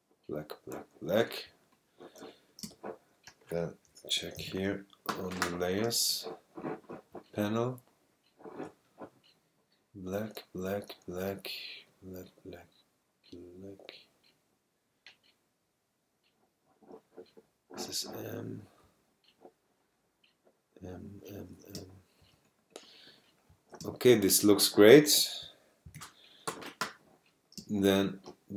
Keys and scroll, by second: 2.6 super+space, 3.6 space, 4.4 alt+super+i, 5.8 space, 21.7 super+space, 23.8 super+space, 24.8 space, 25.9 alt+super+i, 27.6 space.